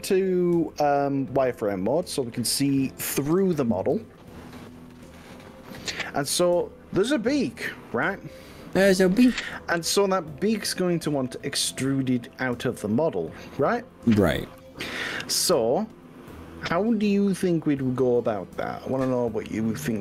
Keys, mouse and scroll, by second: 3.9 z, 7.3-8.9 scroll up 2.